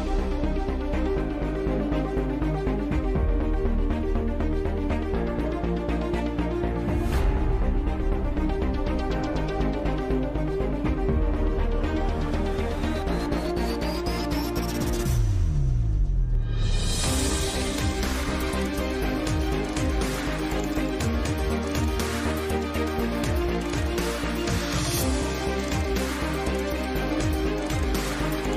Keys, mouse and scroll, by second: 0.1 t, 0.5 click, 1.7 click, 2.3 Tab, 2.5 Tab, 2.9 t, 3.2 r, 4.1 s, 4.6 KP_Decimal, 6.4 s, 6.6 KP_7, 6.7 KP_5, 8.1 s, 8.9 KP_5, 9.2 Tab, 9.8 ctrl+r, 10.3 z, 11.6 x, 12.0 z, 12.8 a, 13.7 s, 15.9 KP_Divide, 16.6 click, 17.1 f, 17.6 i, 18.5 e, 18.8 Tab, 19.2 KP_Divide, 20.0 z, 20.2 z, 20.4 g, 21.9 Tab, 22.5 Tab, 23.0 Tab, 25.6 ctrl+z, 26.7 click, 26.9 KP_Divide, 27.3 click, 27.8 click, 28.4-28.5 typing.